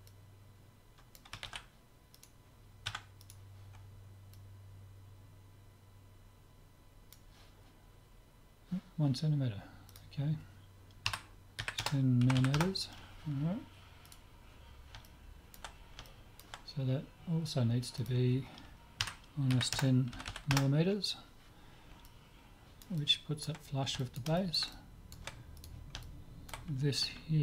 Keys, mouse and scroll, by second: 0.1-1.9 drag, 1.5 ctrl+z, 2.3-5.1 right drag, 2.9 Tab, 4.4-6.3 drag, 9.9-11.7 drag, 12.4 m, 14.1-15.9 right drag, 15.1-17.9 middle drag, 18.1-19.8 drag, 20.3 m, 22.1-27.4 middle drag, 25.6-27.4 drag.